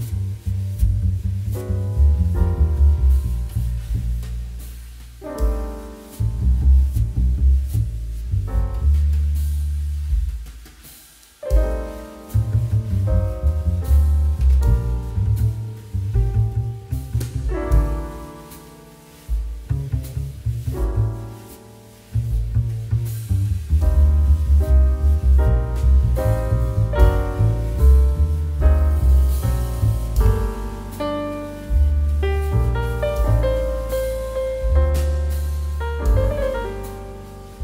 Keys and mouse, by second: 2.0 middle click, 7.1 click, 8.1 z, 9.1 shift+middle click, 9.9 middle click, 10.4 click, 16.0 click, 26.6 click, 34.9 middle click, 35.1 shift+middle click, 36.1 middle click, 36.4 shift+middle click, 36.8 click, 36.9 middle click, 37.2 shift+middle click.